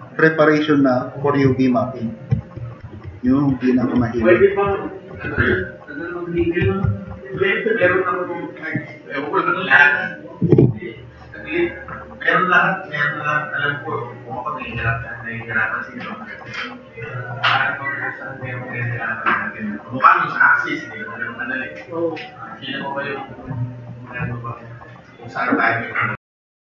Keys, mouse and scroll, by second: 0.3 click, 6.3 click.